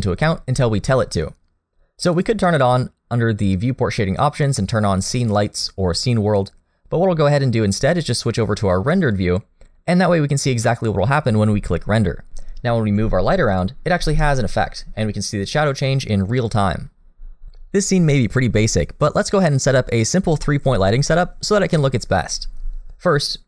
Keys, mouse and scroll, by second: 2.1 click, 9.1 click, 12.4-13.5 scroll down 2, 13.5 click, 13.5-13.9 scroll down 1, 13.9 g.